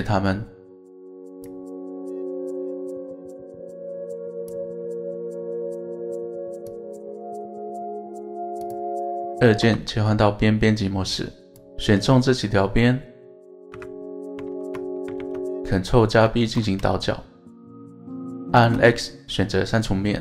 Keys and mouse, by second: 0.5 click, 3.6 click, 6.7 click, 8.6 click, 9.7 2, 10.7 click, 12.2-13.2 middle drag, 13.7 KP_7, 15.2 alt+z, 16.4 ctrl+b, 18.5 shift+click, 19.0 x.